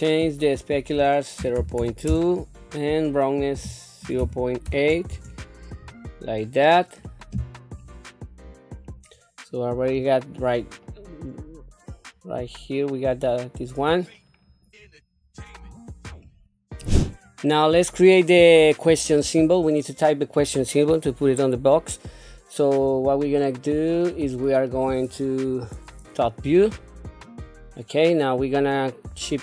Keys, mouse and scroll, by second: 0.6-5.1 drag, 8.9 scroll down 1, 9.5 middle click, 10.2 click, 10.8-14.1 middle drag, 14.4 scroll up 1, 14.9 middle click, 16.2 shift+middle click, 17.1 click, 17.7 click, 23.4 shift+middle click, 24.3 middle click, 25.4 KP_7, 26.6 shift+middle click.